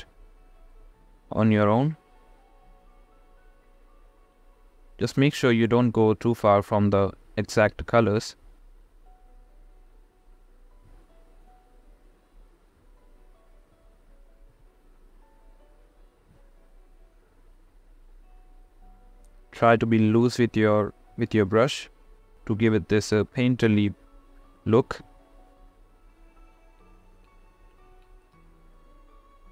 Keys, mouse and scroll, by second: 0.0-4.0 typing, 0.5 click, 2.0 click, 3.2 click, 3.9 ctrl+z, 4.1 click, 4.5 click, 4.9 click, 5.7 ], 6.2 [, 6.3 click, 7.8 click, 9.9 ], 9.9 ], 10.1 ], 10.3 click, 11.3 click, 12.0 [, 12.5 [, 12.8 click, 13.5 [, 13.8 [, 14.0 click, 15.3 click, 15.8 ctrl+z, 15.9 ], 16.1 click, 16.4 ctrl+z, 16.5 ctrl+z, 16.8 click, 17.2 [, 17.4 [, 18.0 click, 18.8 ], 19.2 ], 19.2 ], 19.3 click, 20.5-21.2 [, 21.2-22.3 drag, 23.7-25.0 drag, 25.5-26.7 drag, 27.7-28.1 ], 28.1-29.1 drag, 29.2 click.